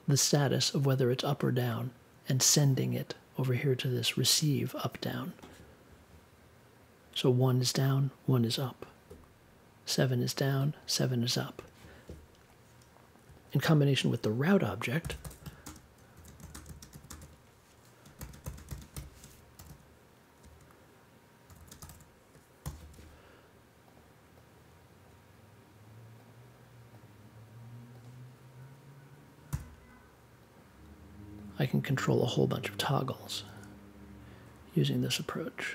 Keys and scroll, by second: 13.9-22.3 typing, 22.6 super+j, 29.5 t.